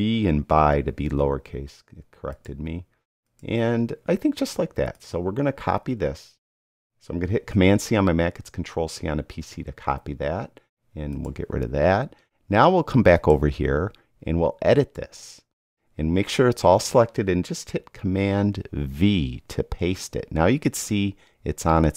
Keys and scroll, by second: 0.5 BackSpace, 0.9 b, 7.8 super+c, 19.2 super+v.